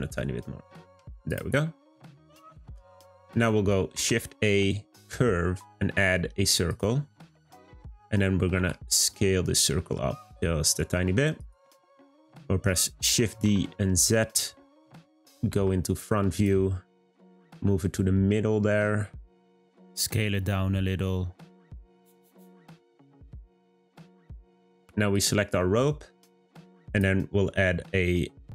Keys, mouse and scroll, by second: 1.3 click, 1.9-3.9 middle drag, 3.9 shift+a, 7.5-8.5 scroll up 1, 8.5 s, 11.8-13.0 scroll up 1, 13.0 shift+d, 15.5 `, 16.9-17.4 scroll up 1, 17.4 g, 23.3 click, 23.6 scroll down 2, 23.9-25.1 middle drag, 25.1 click, 25.6-26.8 middle drag, 26.8-28.5 drag.